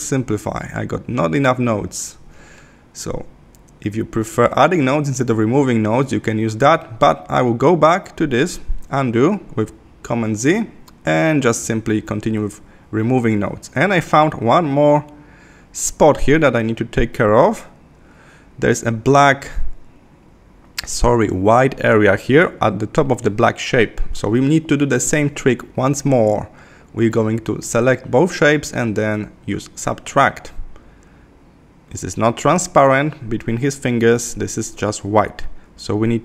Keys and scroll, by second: 2.7 super+z, 12.1 super+=, 21.6 Left, 32.5 Left.